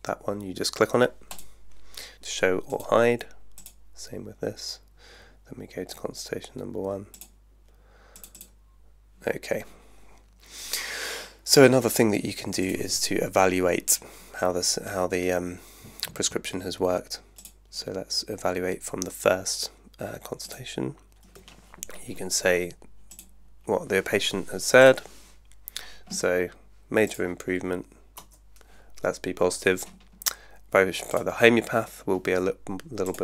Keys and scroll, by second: 28.2 Return.